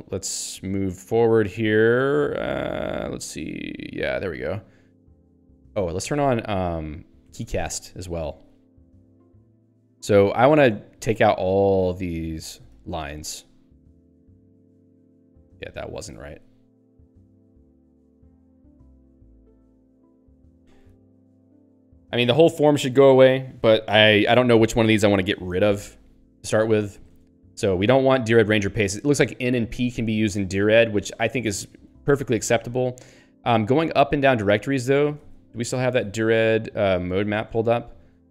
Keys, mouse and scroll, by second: 8.5 Return, 10.3 Right, 10.7 Return, 10.9 Up, 11.7 ;, 11.9 Up, 12.1 Left, 12.2 ;, 12.5 Up, 12.7 ;, 13.2 ctrl+s, 15.6 ;, 15.8 Left, 16.2 Tab, 16.4 Down, 17.6 Tab, 18.2 ;, 18.4 Tab, 18.8 Down, 19.2 Tab, 19.4 ;, 19.6 Tab, 20.3 ctrl+s, 30.6 i, 31.4 BackSpace, 31.8 ctrl+s, 35.8-36.7 typing, 37.0 ctrl+n, 37.4 Return.